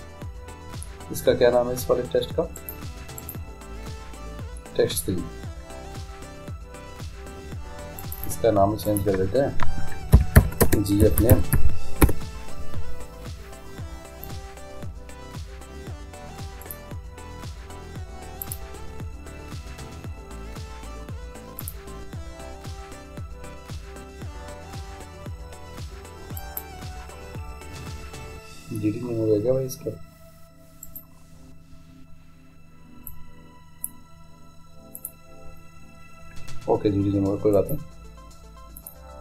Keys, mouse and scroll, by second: 3.2-5.0 right drag, 8.0-10.7 drag, 16.7-18.4 right drag, 18.4-20.2 drag, 20.3-21.6 middle drag, 21.6-23.4 drag, 30.8-32.6 right drag, 33.1-36.8 drag, 37.6-39.2 right drag.